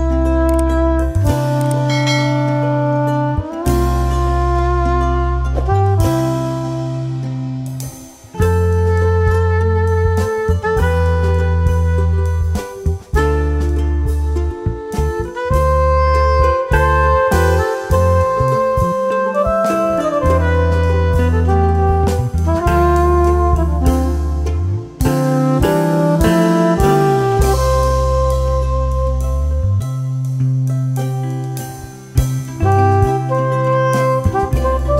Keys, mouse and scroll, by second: 0.5 right click, 1.6 click, 2.4-4.2 ctrl+drag, 4.2 ctrl+click, 5.3 ctrl+click, 6.2 right click, 7.1-10.9 drag, 10.9 right click, 11.7 click, 12.9 shift+Page_Down, 14.0-20.6 drag, 21.7 Right, 23.9 ctrl+click, 25.1 F2, 25.8-30.2 drag, 30.2 right click, 31.1-32.7 drag, 32.7 right click, 34.0 click.